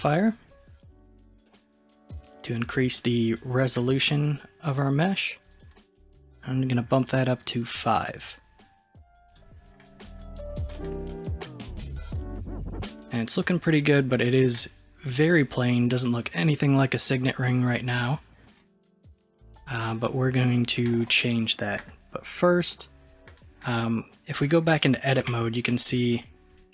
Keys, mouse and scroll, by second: 1.5-2.3 middle drag, 2.3-3.0 scroll up 1, 3.0-3.6 scroll down 1, 3.6-5.5 scroll down 1, 5.5-10.0 drag, 10.0-10.8 scroll down 3, 10.8-12.0 middle drag, 12.0-12.4 scroll up 2, 12.4-18.2 middle drag, 19.3 scroll down 1, 19.6-21.8 scroll up 1, 23.3-25.3 middle drag, 25.3 Tab, 25.8-26.7 middle drag.